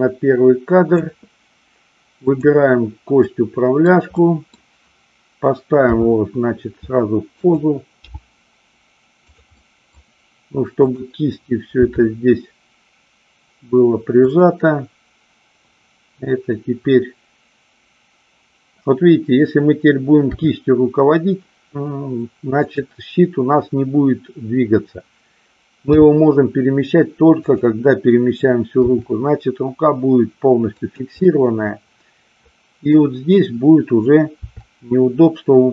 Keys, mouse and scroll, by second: 2.2-3.5 drag, 3.7 middle click, 4.2 middle click, 5.9 r, 7.4 click, 8.1 g, 9.5 middle click, 12.3 r, 14.3 click, 20.3 r, 22.7 click, 25.9 g, 27.4 click, 28.9 r, 30.8 click, 31.2-33.1 middle drag, 34.4 r.